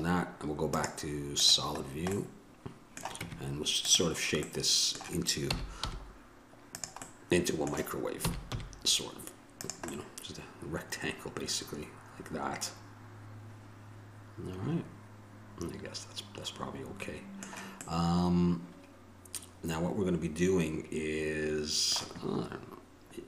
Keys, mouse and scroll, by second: 0.9 click, 2.5 middle click, 3.4 Tab, 5.6 s, 8.4 s.